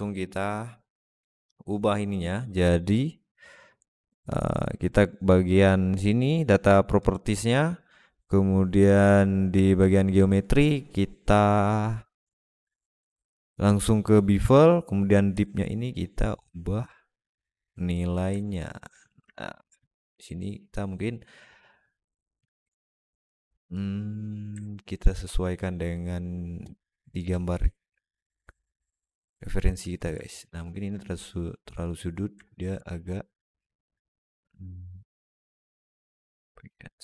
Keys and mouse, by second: 0.2-0.8 drag, 6.8 click, 15.3-17.8 shift+middle drag, 18.2-18.7 alt+middle drag, 19.1 alt+shift+middle drag, 19.5-19.9 middle drag, 24.5-24.9 alt+middle drag, 27.2-29.6 shift+drag, 30.1 alt+shift+middle drag, 30.4 alt+middle drag, 32.3 alt+middle click, 32.6 Tab, 33.0 click, 34.5 click, 36.1 click.